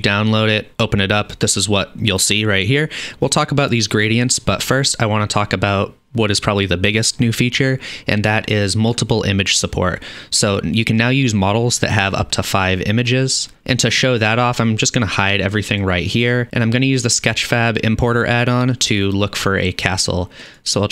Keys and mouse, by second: 15.3-16.4 drag, 16.4-18.7 middle drag, 16.5 n, 18.7-20.9 drag.